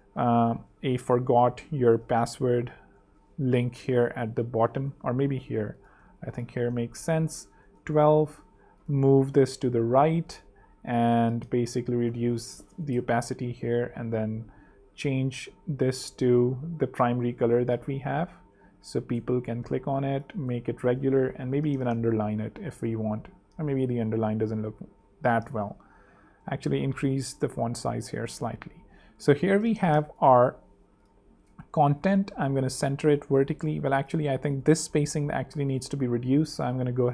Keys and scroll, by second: 0.0-3.7 typing, 4.9 Up, 6.5 shift+a, 7.7 Return, 11.9-13.5 typing, 12.8 Return, 18.6-21.0 typing, 21.3 super+u, 21.5 super+3, 22.9 super+2, 23.2 super+z, 23.6 super+3, 25.4 super+2, 26.0 shift+super+., 26.5 shift+super+3, 27.5 super+3, 28.4 super+2, 29.1 alt+super+z, 29.6 alt+space, 30.2 space, 32.1 alt+v, 33.1 alt+super+v, 33.3 super+z.